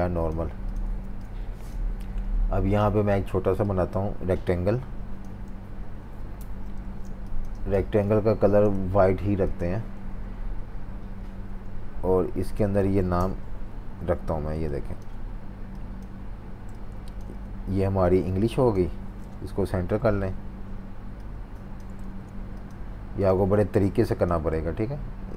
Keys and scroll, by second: 0.9 typing, 6.1-10.0 typing, 19.3 Right, 22.0 super+z, 23.4 typing.